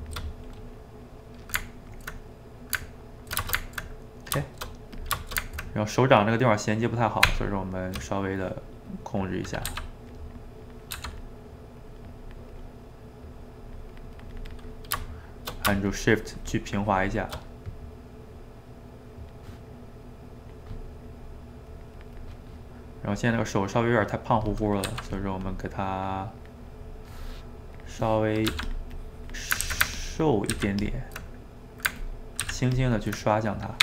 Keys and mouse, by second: 0.3-5.0 middle drag, 5.0 click, 5.2-7.3 ctrl+shift+middle drag, 7.3 Tab, 8.2 middle click, 8.9 click, 9.7 f, 10.6 click, 10.9 f, 11.3 middle click, 11.8 click, 12.8 middle click, 13.3-14.8 drag, 14.8-15.9 middle drag, 15.9-17.4 shift+drag, 17.4-18.8 middle drag, 18.8-22.4 drag, 22.4 middle click, 23.1 click, 24.1 middle click, 24.9 f, 25.3 middle click, 25.9 click, 26.9 middle click, 27.8 click, 28.5 f, 29.0 click, 29.7 ctrl+z, 30.0 ctrl+click, 30.6 ctrl+z, 30.9 ctrl+click, 31.3 middle click, 32.0 ctrl+click, 32.4 ctrl+z, 32.7-33.8 ctrl+drag.